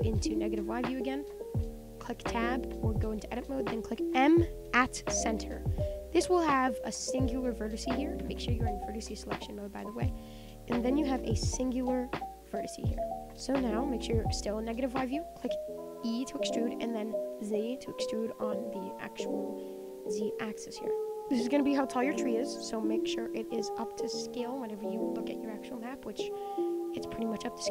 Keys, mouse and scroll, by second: 0.5-0.8 scroll up 8, 0.8-1.5 shift+middle drag, 1.5 Tab, 4.8 m, 5.3 shift+middle click, 5.6-6.1 scroll up 2, 6.1 shift+middle click, 6.8 click, 6.9-9.3 scroll up 1, 9.3 click, 10.4-11.6 scroll up 16, 10.7 shift+middle click, 11.6-12.7 shift+middle drag, 12.7-13.2 scroll down 10, 13.2 shift+middle click, 14.1 click, 14.6 shift+middle click, 15.1 e, 18.7 middle click, 19.1 scroll down 1, 19.2 middle click, 19.6 scroll down 4, 19.8-21.1 middle drag, 21.1 click, 21.2-24.2 middle drag, 24.2 click, 24.5-26.4 middle drag, 26.4-27.7 scroll up 4.